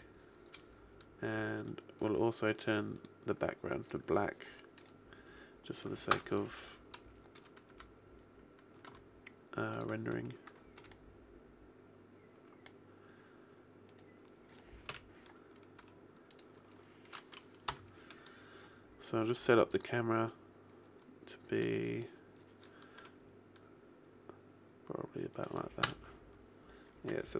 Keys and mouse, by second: 1.5-4.9 drag, 4.9 right click, 6.0 KP_0, 7.3 g, 11.3 g, 14.8 KP_3, 15.7 r, 17.6 ,, 22.9 r, 25.3 click, 25.7 KP_0.